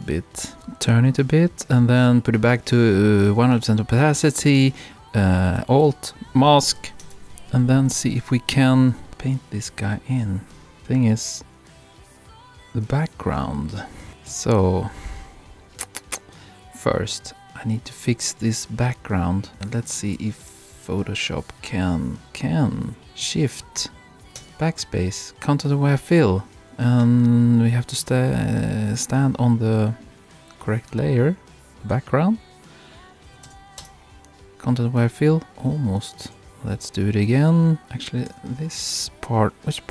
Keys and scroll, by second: 0.5 Return, 20.1 super+-, 24.4 shift+BackSpace, 33.5 shift+BackSpace, 33.8 shift+Return, 34.7 Return.